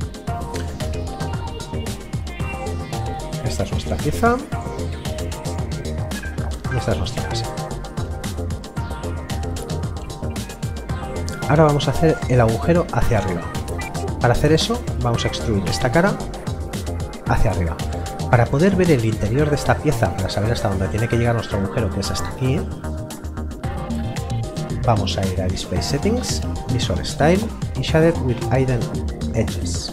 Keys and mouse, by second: 3.2 click, 8.2 middle click, 10.1 click, 11.1 middle click, 18.5 middle click, 20.5 click, 25.5 click, 29.6 click.